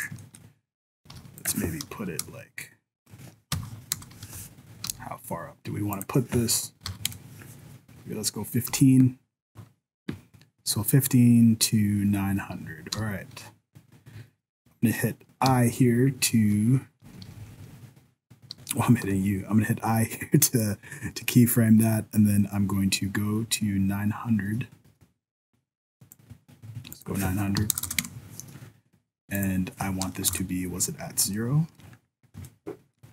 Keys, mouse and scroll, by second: 0.2 shift+middle click, 0.4-1.0 scroll down 3, 1.0 g, 1.8 Right, 2.2 KP_0, 3.9 KP_0, 4.3 m, 4.8 n, 5.9 click, 8.7 n, 9.3-11.8 scroll up 1, 12.9 n, 15.4-17.6 typing, 19.0 i, 20.6 click, 26.9 click, 27.8 KP_0, 29.4 click, 31.0-31.4 scroll up 7, 31.4 shift+middle click, 31.8-32.4 scroll down 6, 32.5 shift+middle click, 33.0 shift+scroll down 1.